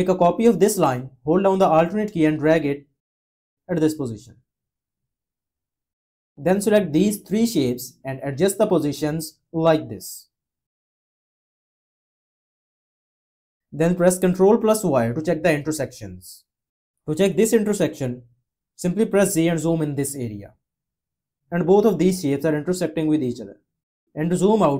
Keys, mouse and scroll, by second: 2.3-4.3 alt+drag, 14.4 y, 19.3 z, 24.6 -.